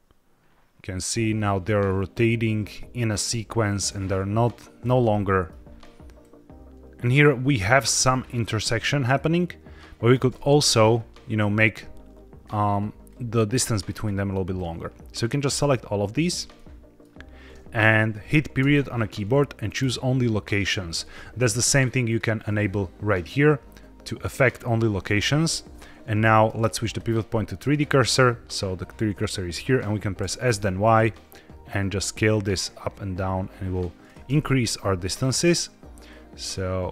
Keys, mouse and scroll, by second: 4.9-5.4 middle drag, 6.1-10.1 drag, 10.2 middle click, 11.6-12.3 middle drag, 13.0-13.5 drag, 13.8 middle click, 14.4-15.4 drag, 16.4-17.0 middle drag, 21.9-24.5 drag, 26.7-27.6 drag, 30.1 s, 30.4 y, 33.9 click, 34.2 middle click, 34.9 middle click, 36.0-36.9 drag.